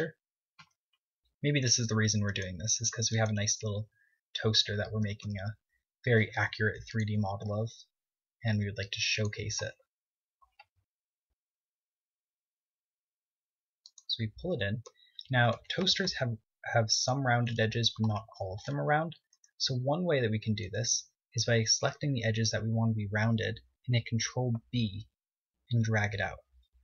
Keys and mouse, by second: 2.2 KP_3, 3.2 s, 4.0-5.5 drag, 4.1 s, 4.9 z, 6.6 s, 8.5-10.3 drag, 8.6 s, 10.7-13.2 drag, 12.3 s, 15.4 click, 15.9 Tab, 16.3 Tab, 17.0 Tab, 25.7 ctrl+b.